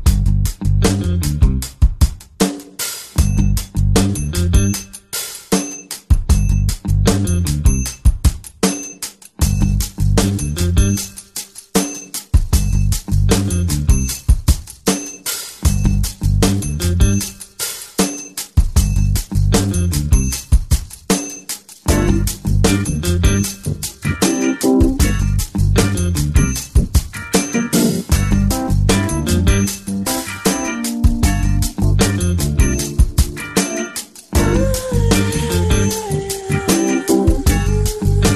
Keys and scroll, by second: 0.0-0.7 typing, 1.8 space, 3.8 space, 4.1 space, 6.1 space, 6.4 space, 7.5 p, 8.5-14.1 typing, 17.2 space, 19.2 space, 20.1 space, 22.4 space, 23.3 ctrl+z, 23.5 ctrl+z, 25.3 =, 25.5 space, 26.7 space, 27.3 space, 28.0 space, 28.8 space, 29.9 space, 30.0 space, 31.5 space, 34.8 space, 35.4 space, 36.7 -, 37.2 space, 37.7 ctrl+=, 38.0 space.